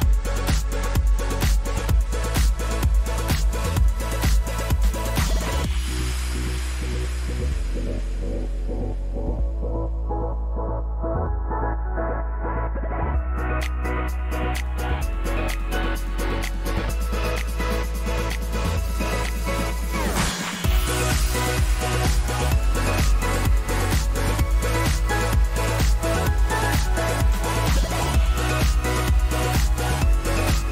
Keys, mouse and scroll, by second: 0.1 Right, 5.0 click, 6.5 shift+click, 7.3 shift+click, 8.7 shift+click, 9.7 ctrl+g, 10.5 click, 11.4 click, 11.9-12.9 drag, 13.4-15.1 drag, 16.0 ctrl+c, 16.2 ctrl+v, 18.3 click, 18.7 click, 19.3-20.4 drag, 20.5 ctrl+a, 20.9 click, 21.3-25.0 typing, 27.2 click, 27.9 click, 28.5-29.9 shift+drag, 29.4 ctrl+z, 30.2 click.